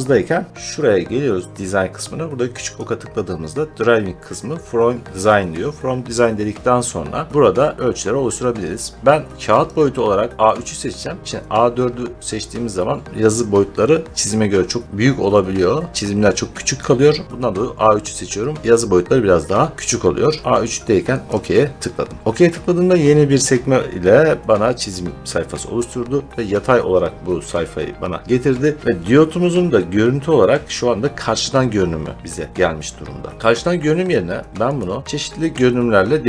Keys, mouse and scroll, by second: 2.6 click, 9.6 click, 10.5 click, 21.2 click, 34.7 click.